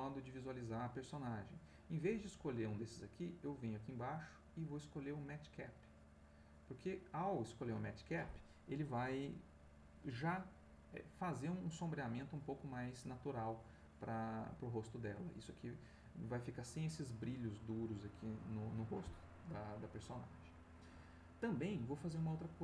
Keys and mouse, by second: 3.2 click, 5.7 click.